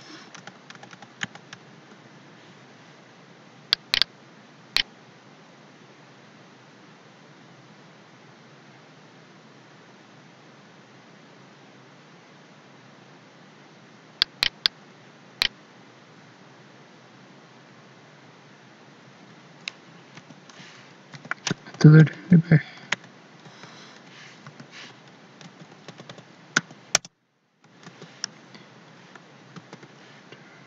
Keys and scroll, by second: 0.0 Escape, 0.3 ctrl+Left, 1.2 ctrl+Left, 20.1 End, 22.9 ctrl+shift+Left, 25.5 ctrl+x, 25.9 Up, 26.5 End, 27.8 ctrl+v, 29.5 ctrl+s.